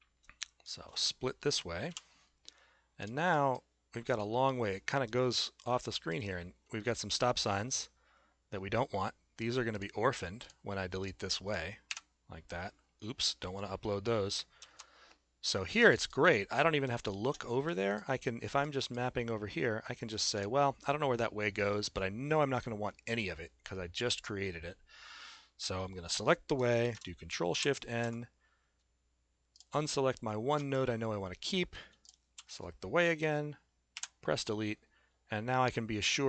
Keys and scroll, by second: 1.9 p, 11.9 Delete, 14.8 ctrl+z, 27.5 ctrl+shift+n, 34.0 Delete.